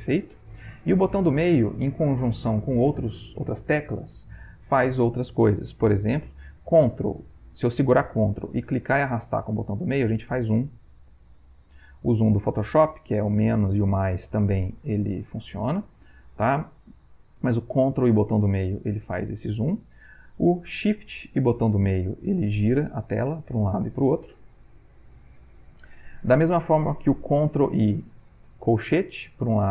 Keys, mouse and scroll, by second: 8.9-13.9 ctrl+drag, 13.9 =, 15.0 -, 18.9 ctrl+middle click, 22.7-24.1 shift+drag, 24.1-26.8 shift+middle drag, 28.2 ctrl+[, 29.6 ctrl+].